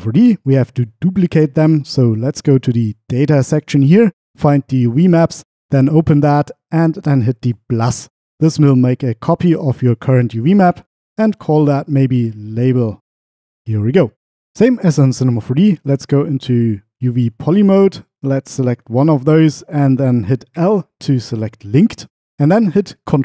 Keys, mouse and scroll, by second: 4.8 click, 7.5 click, 8.6-13.3 drag.